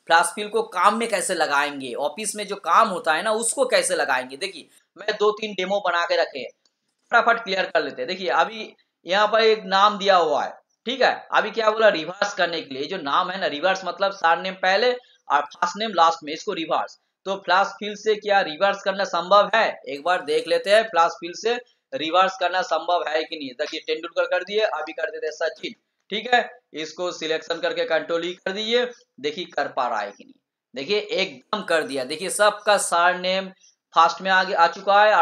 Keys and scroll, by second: 29.8 ctrl+e.